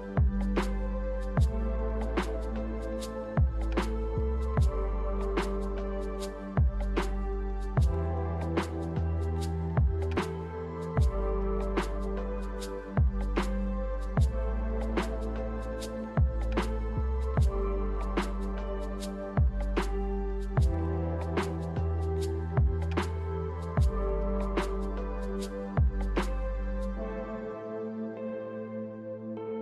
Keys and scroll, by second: 0.1 Return.